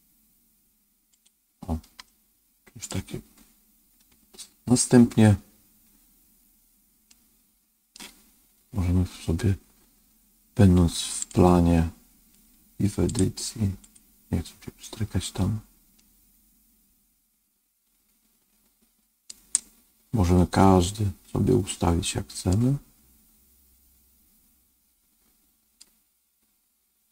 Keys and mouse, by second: 1.1 click, 2.0 middle click, 7.0 middle click, 11.1 click, 13.1 click, 15.9-19.2 middle drag, 22.4-25.7 middle drag.